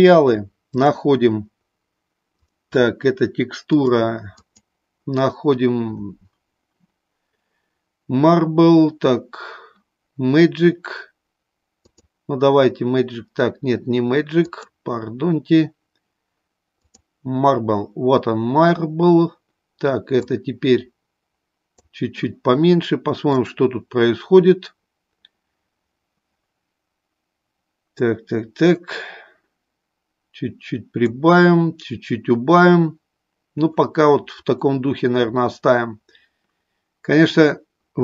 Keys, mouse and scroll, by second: 0.6 click, 2.4-3.9 drag, 4.4-12.0 drag, 14.4-17.0 drag, 20.1-21.6 drag, 23.8 click, 27.9-31.0 drag.